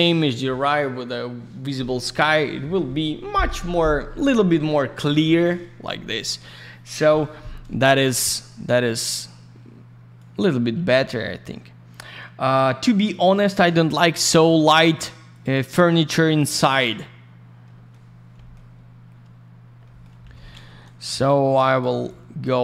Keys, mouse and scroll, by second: 0.1-1.0 scroll down 1, 8.5 click, 8.6 click, 10.1 click, 15.3 click, 15.4 click, 15.5 click, 15.6 double click, 17.6 middle click, 18.0 scroll down 1, 18.3 middle click, 18.5 middle click, 18.8 scroll up 1, 19.8 middle click, 20.0 middle click, 20.7 alt+middle click, 21.2 click, 22.0 alt+я, 22.0 alt+click.